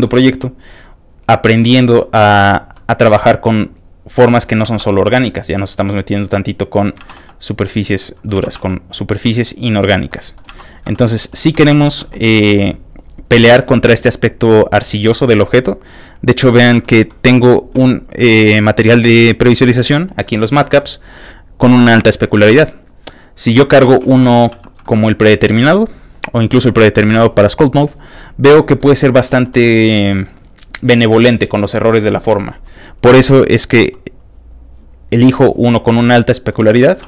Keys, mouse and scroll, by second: 0.3 f, 0.3 click, 0.6-1.9 drag, 2.3 ctrl+z, 2.4 f, 2.5 ctrl+click, 2.7 ctrl+middle click, 3.1 f, 3.3 click, 3.7 click, 4.7 ctrl+z, 4.8 f, 4.9 ctrl+click, 5.2-6.8 ctrl+drag, 7.0 ctrl+z, 7.3 click, 7.3 f, 7.5 click, 8.4 ctrl+z, 8.6 f, 8.7 click, 8.9-9.9 drag, 10.1 middle click, 10.5 ctrl+z, 11.0 f, 11.0 shift+click, 11.3 middle click, 11.7 shift+middle click, 12.0 click, 12.0 shift+f, 12.4 click, 12.7 middle click, 13.8 click, 14.3-15.4 drag, 15.7 middle click, 16.5 ctrl+shift+middle click, 17.1 ctrl+shift+middle click, 18.8 shift+click, 21.0 click, 23.3 click, 23.8 middle click, 23.8-24.1 scroll down 3, 24.1 shift+middle click, 24.6 shift+click, 24.8 shift+middle click, 25.0 shift+middle click, 26.2 shift+click, 26.7 shift+click, 27.7 shift+click, 28.1 shift+middle click, 29.1 f, 29.2 click, 29.5 middle click, 29.7 shift+middle click, 31.1 shift+middle click, 33.4 shift+click, 34.5 shift+click, 35.2 shift+click, 35.9 shift+middle click, 36.1 shift+middle click.